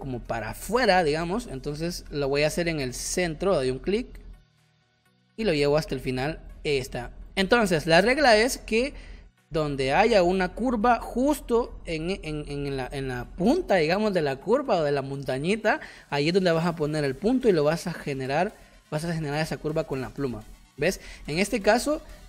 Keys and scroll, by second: 4.6 space, 7.0 space, 20.5 space.